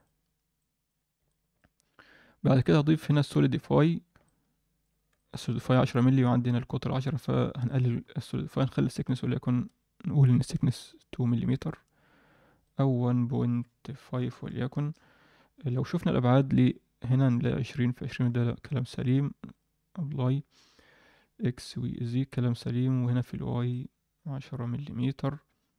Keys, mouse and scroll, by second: 0.5 drag, 1.2 alt+middle drag, 2.6-3.8 drag, 4.2-4.8 middle drag, 5.1 alt+shift+middle click, 7.6-10.5 drag, 12.6-14.8 drag, 16.5 click, 18.8 ctrl+a, 23.7-24.9 middle drag.